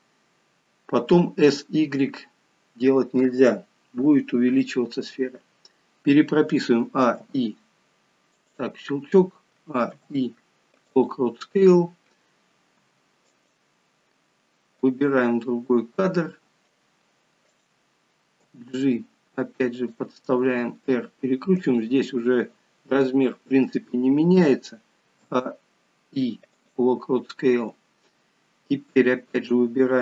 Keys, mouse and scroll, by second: 9.6 a, 10.0 i, 15.0 click, 17.6 click, 18.5 g, 25.2 a, 25.4 i, 29.4 click.